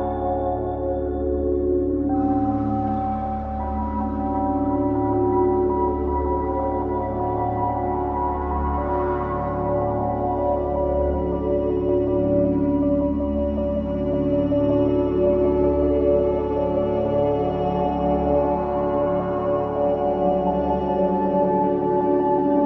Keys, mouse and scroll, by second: 0.0 drag, 0.4 click, 0.6 click, 1.3-2.2 drag, 2.2 scroll up 2, 2.6-3.2 middle drag, 3.2-4.7 scroll up 1, 4.7 ctrl+b, 7.1 click, 7.5-11.4 middle drag, 11.4-12.0 drag, 14.3 shift+d, 15.5-16.7 drag, 17.4 middle click, 18.2 click, 19.1 click, 21.1 click, 22.0-22.6 middle drag.